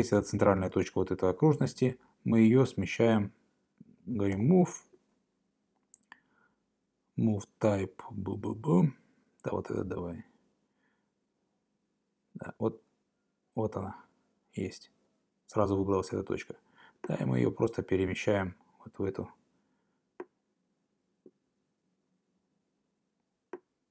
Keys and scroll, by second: 4.3 m.